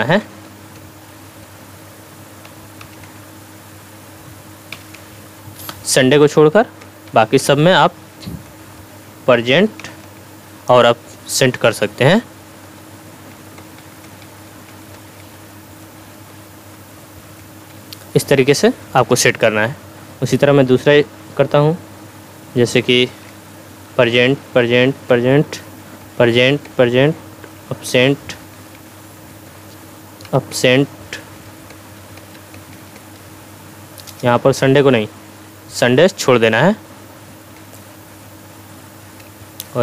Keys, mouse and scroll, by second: 0.0-1.1 typing, 0.2 Tab, 0.8 Tab, 1.4 Tab, 2.8 a, 3.0 Tab, 4.7-7.6 typing, 4.9 Tab, 6.2 Tab, 6.8 Tab, 7.4 Tab, 8.5 Tab, 9.8 a, 10.0 Tab, 12.7-15.2 typing, 13.1 Tab, 13.6 Tab, 14.1 Tab, 14.5 Tab, 14.9 Tab, 15.9 Tab, 16.6 p, 17.4 Tab, 17.7 p, 19.0 Return, 23.9-26.2 typing, 24.1 Tab, 24.6 Tab, 26.0 Tab, 26.7 Tab, 27.5 a, 27.9 Tab, 28.7 p, 29.5 Tab, 30.3 a, 30.5 Tab, 31.3-33.2 typing, 31.7 Tab, 32.2 Tab, 32.6 Tab, 33.0 Tab, 34.4 Tab, 35.8 p, 36.3 Tab, 37.9 p, 39.0 BackSpace.